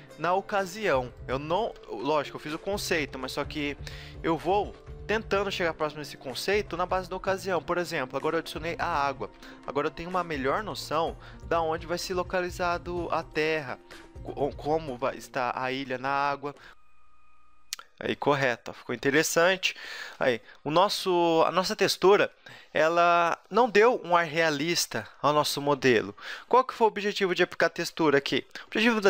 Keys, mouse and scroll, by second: 0.0 a, 0.1 middle click, 0.9 scroll down 1, 1.1 middle click, 1.1 right click, 1.3 click, 1.9-4.0 right drag, 2.1 g, 3.2 a, 4.0 Tab, 4.0-5.3 middle drag, 5.0 right drag, 6.5 right click, 6.5 g, 6.7-7.6 drag, 6.7 a, 7.6 Tab, 8.6 z, 9.6-11.7 middle drag, 10.1 KP_7, 11.7 b, 12.7 g, 13.6 a, 13.7 b, 15.4 g, 16.0 a, 16.0 click, 16.2 z.